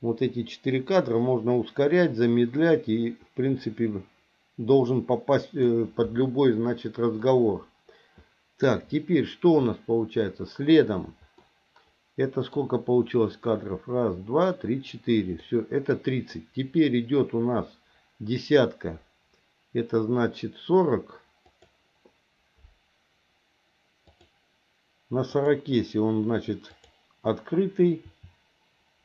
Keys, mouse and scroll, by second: 7.2-8.6 middle drag, 11.5-12.5 middle drag, 15.4 middle click, 21.5 click, 24.1 click, 25.4 click, 26.7 click, 28.0 r.